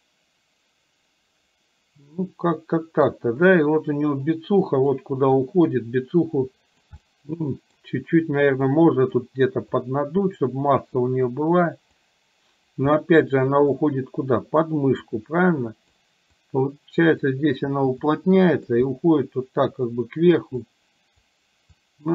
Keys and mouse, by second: 4.8 click, 5.5-7.0 drag, 7.0 middle click, 8.8 click, 9.9 click, 11.4 click, 12.9 middle click, 13.8-14.8 drag, 15.2 click, 16.4-17.4 drag, 18.2 click, 18.9 middle click, 20.8 click, 21.9 click.